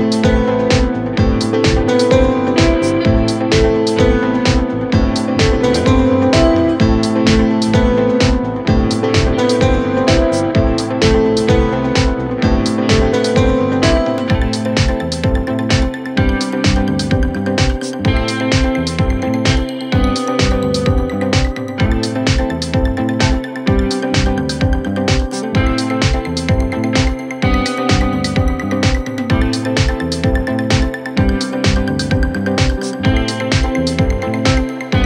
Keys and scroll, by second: 11.3 ctrl+z, 20.5 KP_Add, 24.4 ctrl+g, 24.8 F3, 25.9 c, 26.3 Escape, 27.5 shift+F2, 27.9 F3.